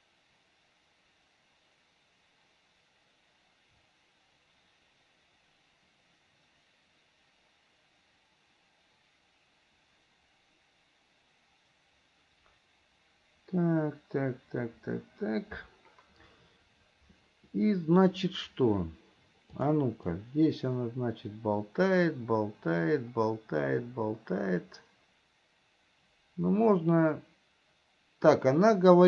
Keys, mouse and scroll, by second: 19.8 click, 20.4-29.0 drag.